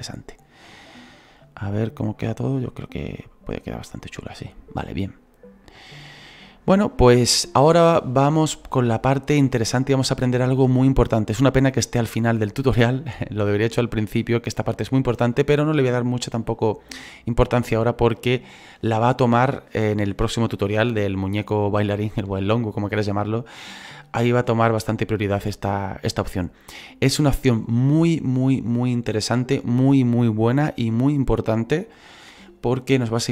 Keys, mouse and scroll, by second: 1.3-4.3 drag, 8.7 scroll down 3, 10.8-26.1 drag, 26.1-33.3 middle drag.